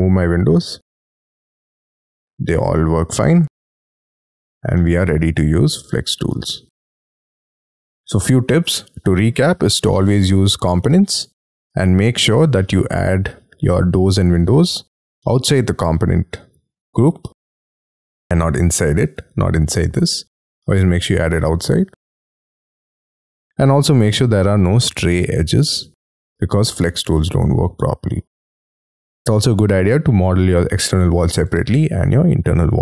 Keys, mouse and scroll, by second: 0.7-1.4 scroll up 3, 2.2 double click, 2.3 ctrl+z, 2.7 scroll down 6, 3.0 scroll up 4, 3.6 m, 4.2 double click, 4.7 ctrl+z, 5.0-5.4 scroll down 5, 5.4 shift+middle click, 7.6 shift+middle click, 8.1 middle click, 9.8 scroll down 2, 10.1 space, 11.4 Escape, 12.6 double click, 12.9 double click, 13.4 scroll up 4, 16.0 middle click, 19.2 double click, 19.4 double click, 19.7 double click, 21.1 Escape, 22.2 middle click, 23.6 shift+middle click, 24.7-25.1 scroll down 3, 25.4 middle click, 27.2 scroll up 4, 28.2 scroll down 5.